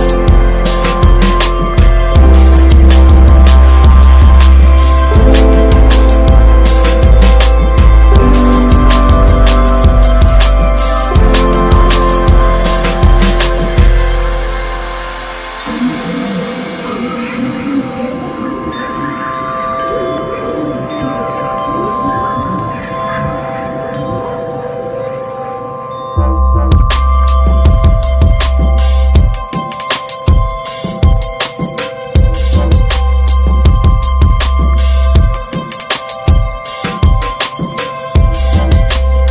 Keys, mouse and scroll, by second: 0.9 click, 1.5 s, 3.0 ctrl+s, 3.7 shift+click, 4.2 shift+click, 5.0 click, 5.4 click, 6.0 shift+click, 7.5 /, 7.9 click, 8.5 click, 9.2-10.6 right drag, 10.6 drag, 11.6 ctrl+s, 11.8 drag, 12.1 scroll up 2, 12.3-13.0 shift+middle drag, 13.0 click, 14.9-21.9 drag, 22.2-25.0 drag, 25.0 click, 25.6-27.9 drag, 28.1-28.7 ctrl+scroll down 2, 29.1-29.6 ctrl+scroll up 1, 29.6 scroll down 1, 30.2 click, 30.9 click, 31.1-31.5 scroll up 2, 31.7 click, 32.5 ctrl+z, 33.0 drag, 35.0 scroll up 1, 35.4-35.9 shift+middle drag, 36.8 scroll up 2, 37.5 click.